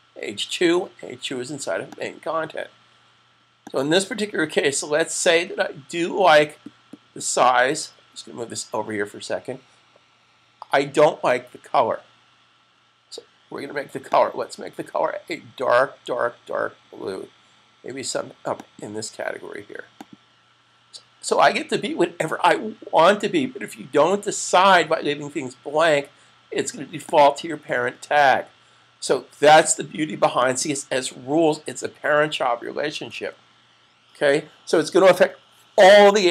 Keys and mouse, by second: 13.8 click, 18.3 click, 27.1 click, 32.1 click, 33.0 super+s.